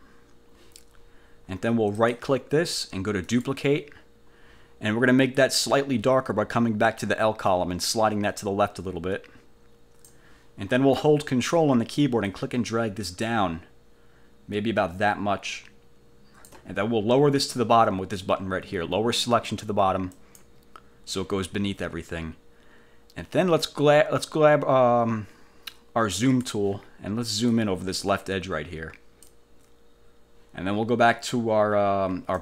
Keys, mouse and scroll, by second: 2.1 click, 3.4 click, 7.6-10.4 drag, 12.4-16.8 ctrl+drag, 20.3 click, 26.2 click, 27.6-29.5 drag.